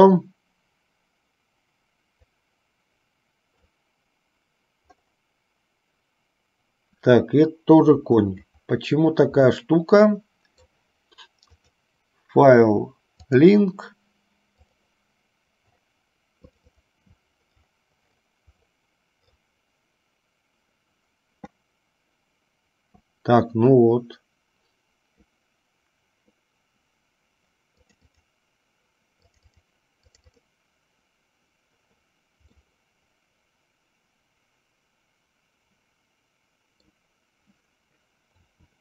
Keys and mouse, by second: 2.6-4.0 drag, 9.7-10.8 middle drag, 11.7-13.8 drag, 32.8-37.0 middle drag.